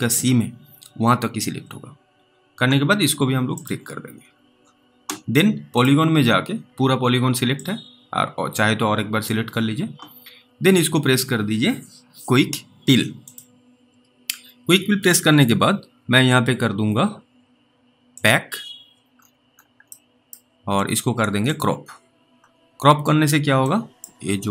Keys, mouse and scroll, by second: 3.5 alt+middle click, 3.6 click, 4.1-4.9 scroll down 2, 5.8 click, 7.9 click, 13.2 click, 18.2 click, 19.1-19.7 scroll down 1, 20.2 middle click, 20.2 scroll down 1, 21.5 click, 22.4-22.8 scroll up 2, 23.9 middle click, 24.2-24.5 scroll up 1.